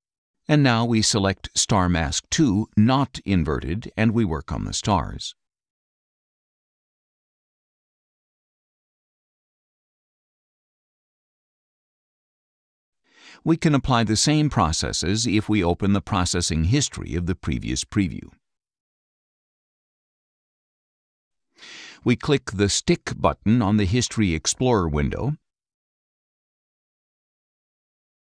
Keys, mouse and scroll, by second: 0.7-2.0 drag, 3.6 click, 5.1 click, 6.0 click, 7.9 click, 10.0 click, 11.1 click, 13.2 click, 14.6 click, 18.7 click, 19.9 right click, 21.6 click, 23.7 click, 27.1 click.